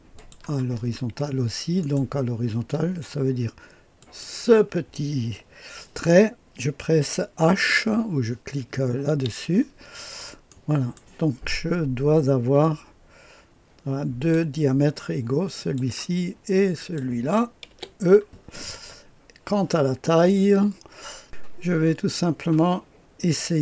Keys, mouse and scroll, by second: 0.1 click, 0.7-1.8 scroll up 2, 1.8 right click, 3.9 click, 9.0 h, 9.9-10.5 scroll down 1, 10.5-11.7 right drag, 12.6-15.0 drag, 15.5 click, 16.7 click, 17.2-18.2 typing, 18.4-19.1 scroll up 1, 19.1-21.2 scroll up 1, 21.2 click, 22.0-23.6 drag.